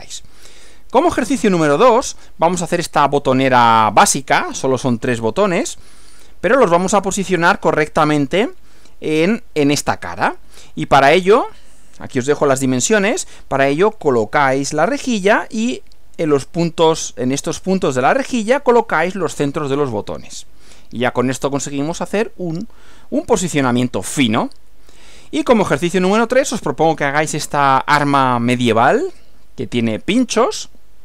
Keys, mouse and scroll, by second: 1.3 Right, 10.4 Right, 25.2 Right.